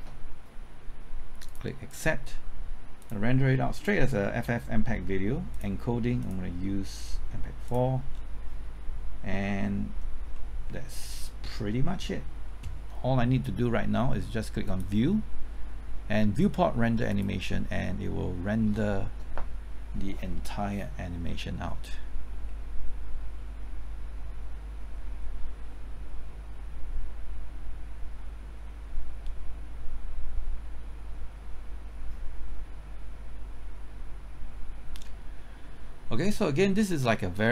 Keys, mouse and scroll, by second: 1.4-4.7 drag, 8.1-10.3 scroll down 1, 10.3 middle click, 14.6-15.7 drag.